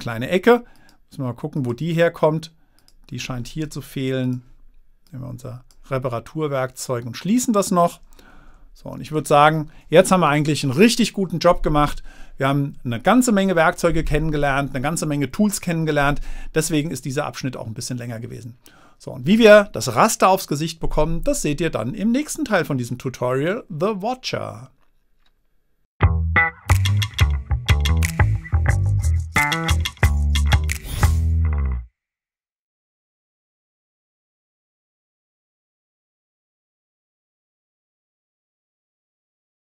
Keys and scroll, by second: 8.8 super+-, 9.6 super+-.